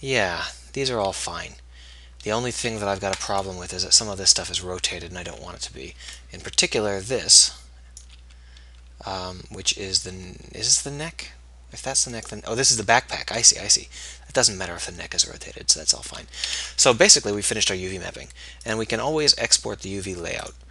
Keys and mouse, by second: 3.0 a, 5.7 a, 10.4 ctrl+z, 16.9 ctrl+s.